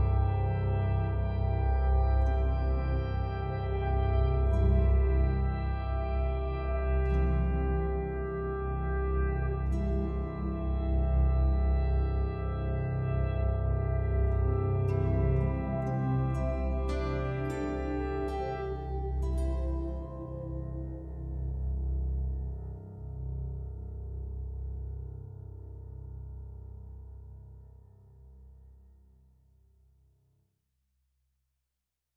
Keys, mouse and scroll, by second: 1.6 click, 5.9 Return, 7.4 click, 9.9-10.3 scroll down 1, 10.3-11.6 scroll up 1, 11.6 click, 12.5 shift+click, 13.1 click, 26.2 click, 30.9-31.3 scroll up 1.